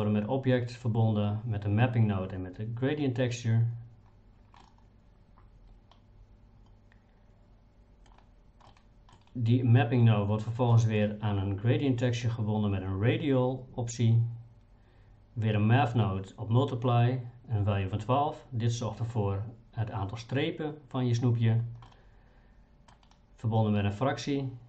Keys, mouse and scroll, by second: 4.6-8.1 middle drag, 8.7 middle click, 10.7 middle click, 21.9-22.9 middle drag.